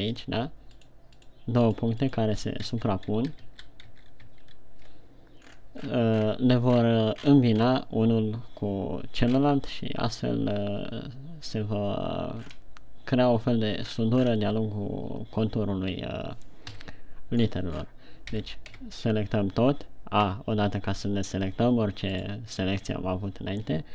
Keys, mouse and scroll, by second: 0.0 right click, 0.6 click, 1.2 right click, 1.6 right click, 2.2 right click, 2.5 right click, 3.1 ctrl+z, 3.5 ctrl+z, 3.9 ctrl+z, 4.4 ctrl+z, 4.7 ctrl+z, 5.9-7.6 scroll down 16, 7.8-8.6 scroll up 8, 9.8 scroll up 3, 12.8-13.4 scroll down 6, 14.9 shift+scroll down 6, 17.3 KP_1, 18.0-18.5 scroll down 10, 18.9 a, 19.2 a, 20.9 a, 22.8 right click, 23.4 a.